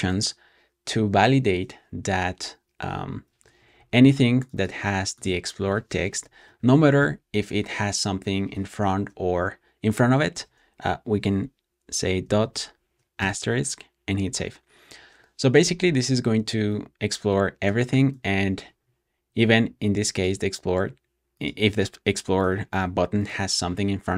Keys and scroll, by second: 5.8-6.9 typing, 10.2 typing, 12.1 shift+8, 13.1 super+s.